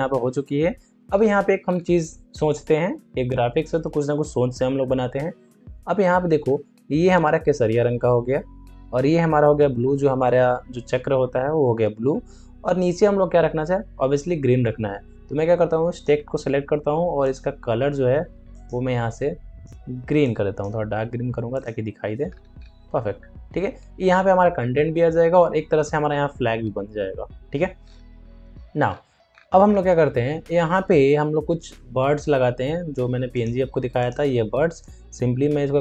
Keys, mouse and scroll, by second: 1.0 scroll up 1, 1.6 scroll down 1, 15.5 ctrl+Num_Lock, 15.8-21.4 drag, 22.2 alt+scroll down 1, 24.3-24.8 alt+scroll up 1, 27.7 scroll up 1, 29.2 scroll, 29.3 scroll down 1, 31.4 scroll up 1, 33.3-35.8 drag.